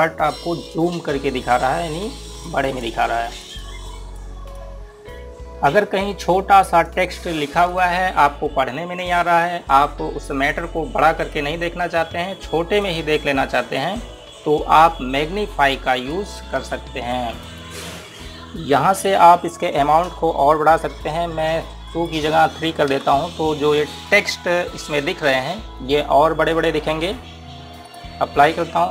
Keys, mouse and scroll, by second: 3.0 click, 5.9-6.6 scroll down 1, 6.6-7.3 scroll up 1, 7.3 click, 8.9-11.3 scroll down 1, 11.5 click, 15.2-16.1 scroll up 1, 16.1 click, 22.6 click, 23.6 KP_3, 28.6 click.